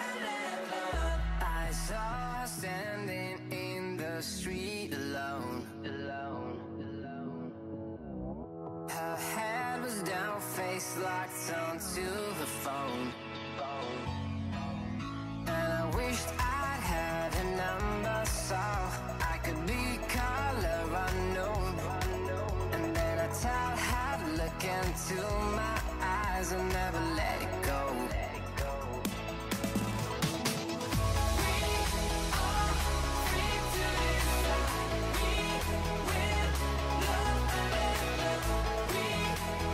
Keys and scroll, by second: 24.4 shift+s, 25.8-28.4 typing, 29.9 l, 30.6 7.